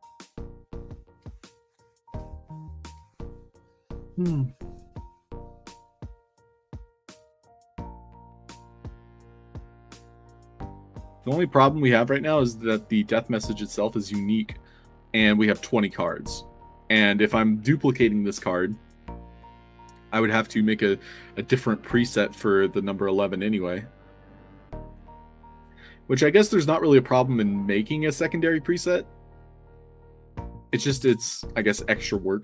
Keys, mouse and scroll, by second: 19.3 drag, 28.2 click.